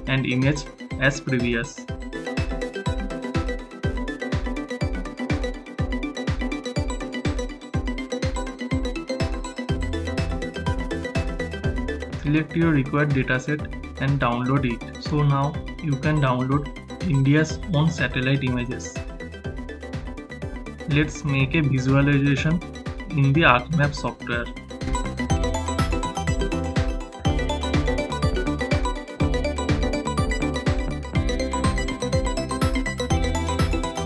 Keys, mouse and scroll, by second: 2.8 click, 2.9 click, 10.7 click.